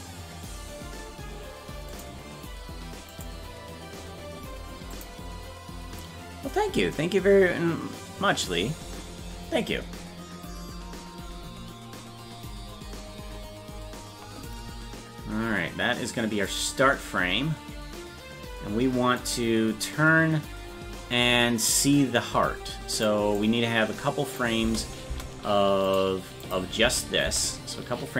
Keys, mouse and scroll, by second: 16.5-19.2 drag, 23.0 click, 23.4-24.4 drag, 24.6 space, 25.9 click, 25.9 space, 26.5 click, 26.8 space.